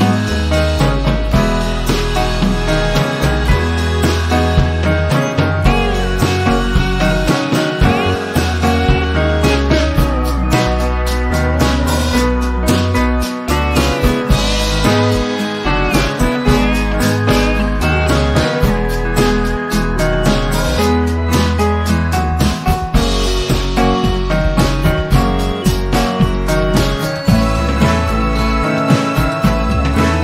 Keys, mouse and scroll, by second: 0.2 m, 1.3 m, 1.9 m, 3.3-5.1 drag, 5.6 shift+v, 5.8 shift+click, 8.9 ctrl+z, 9.5 v, 9.9 click, 11.2 v, 12.3 shift+click, 13.3 click, 14.3 shift+click, 15.5 click, 16.8 ctrl+scroll down 1, 18.0 z, 19.1-20.0 alt+drag, 22.1 p, 23.2 click.